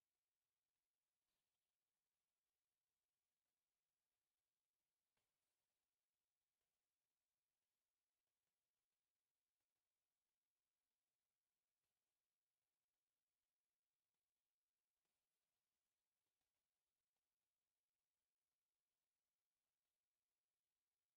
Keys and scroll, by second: 0.1 space, 1.0 Escape, 2.5 s, 3.6 Escape, 4.0 m, 4.3 space, 4.9 Escape, 9.1 F8, 13.6 t, 13.8 space, 14.8 Escape, 15.0 e, 15.3 space, 15.9 Escape, 16.7-19.5 typing, 17.2 Escape, 18.5 Escape, 19.2 Escape, 20.3 Escape, 20.6 x, 20.7 space, 20.8 f, 20.9 space.